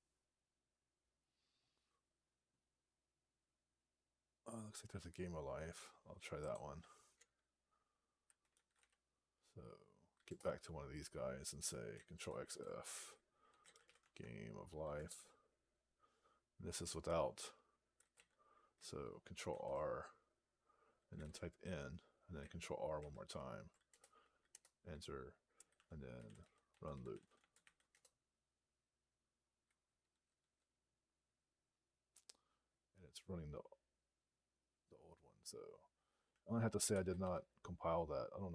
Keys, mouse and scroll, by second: 10.1 Return, 12.3 ctrl+f, 13.1-14.2 typing, 15.0 Return, 19.4 ctrl+r, 20.7-21.6 typing, 22.8 ctrl+r, 23.8 Return, 24.4 Return, 25.4-28.0 typing.